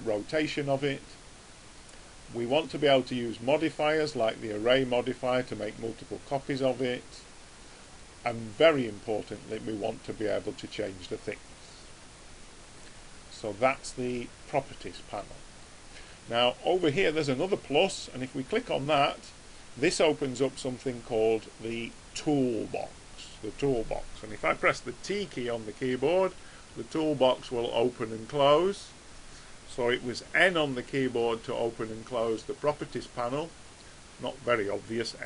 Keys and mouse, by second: 1.9-4.4 drag, 6.6-11.3 drag, 11.7-18.5 middle drag, 18.5 click, 22.0 click, 25.2 t, 26.3 t, 27.4 t, 28.4 t, 30.5 n, 31.5 n, 32.8 n.